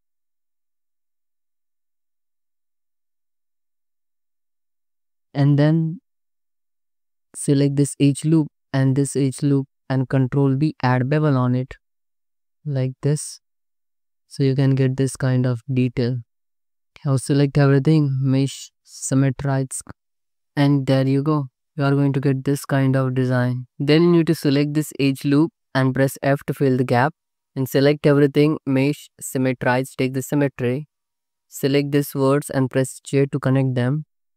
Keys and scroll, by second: 4.2 alt+z, 4.4 Tab, 4.8 alt+shift+z, 6.2 alt+shift+z, 6.7 Tab, 7.9 2, 10.9 ctrl+b, 12.4 5, 12.6 Tab, 13.4 alt+shift+z, 17.0 Tab, 17.7 a, 20.4 Tab, 21.4 alt+shift+z, 23.7 Tab, 24.8 2, 26.5 f, 27.6 a, 31.0 1, 33.1 j.